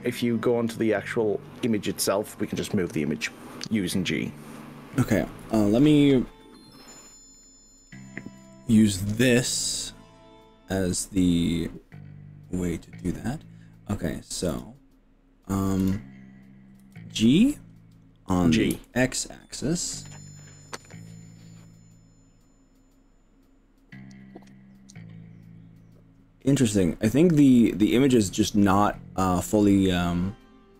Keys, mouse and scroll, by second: 1.0-1.7 scroll down 4, 2.1 middle click, 2.5 middle click, 3.2 scroll down 2, 3.8 scroll up 1, 4.2 middle click, 5.1 scroll up 1, 5.4 KP_1, 6.9-7.9 shift+middle drag, 8.8-9.6 scroll up 5, 10.8 scroll up 1, 14.6 click, 16.0 click, 16.9 g, 18.8 x.